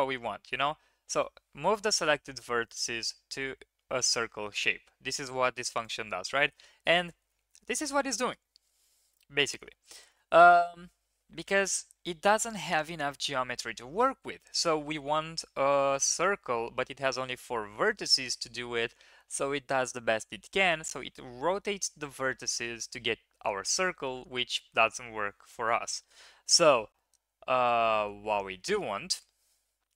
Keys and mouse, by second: 28.3 ctrl+z.